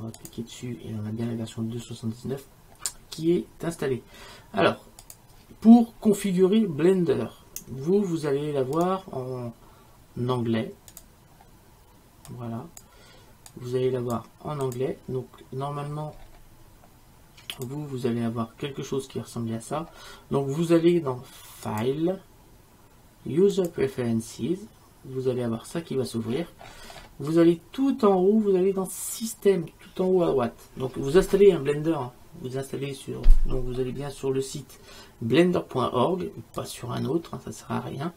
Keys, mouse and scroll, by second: 0.3-2.7 drag, 8.8-10.7 drag, 12.1-13.4 middle drag, 17.4 middle click, 17.5 click, 20.4-21.4 middle drag, 21.8-23.6 drag.